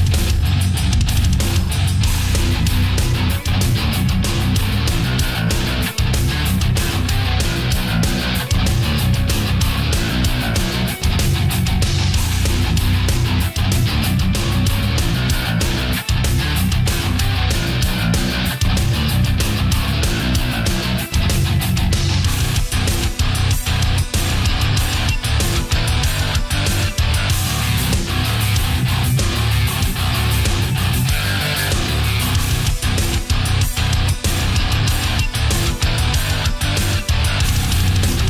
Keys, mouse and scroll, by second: 3.9 right click, 4.6 shift+right click, 6.2 click, 7.6 b, 7.8-8.9 drag, 9.5-10.7 drag, 11.7 a, 12.1 b, 12.5-13.7 drag, 14.3-15.4 drag, 15.6 right click, 16.2 shift+right click, 16.7 shift+right click, 17.1 shift+right click, 17.8-19.6 drag, 23.1 right click, 25.1-25.9 middle drag, 26.3-28.9 drag, 29.1 middle click, 29.8 middle click, 30.9 right click, 31.6 shift+right click, 32.3-33.6 drag, 33.8 middle click, 36.8 right click, 37.8 shift+right click.